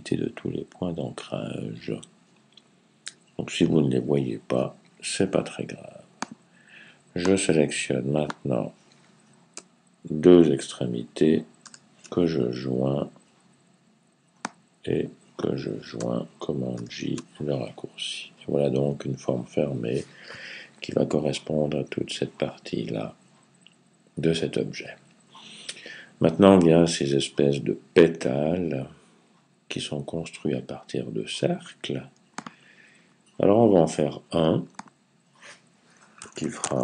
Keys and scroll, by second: 11.5 super+j, 16.6 super+j, 35.8-36.8 typing.